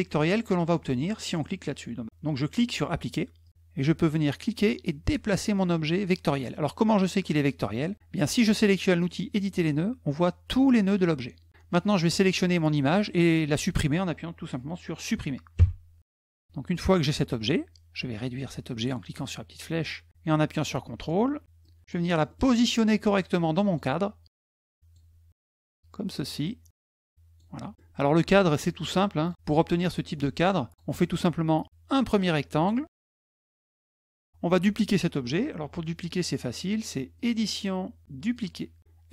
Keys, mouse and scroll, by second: 3.2 click, 4.2-5.8 drag, 9.1 click, 12.0 click, 16.0 middle click, 18.3-20.9 ctrl+drag, 21.2 middle click, 21.4 click, 21.9 middle click, 22.1 middle click, 22.2 middle click, 22.4 middle click, 22.9 click, 24.2 ctrl+click, 25.2 click, 26.7 click, 27.6 click, 28.4 click, 29.0 click, 31.4-33.4 drag, 33.9 click, 36.9 click, 38.1 click.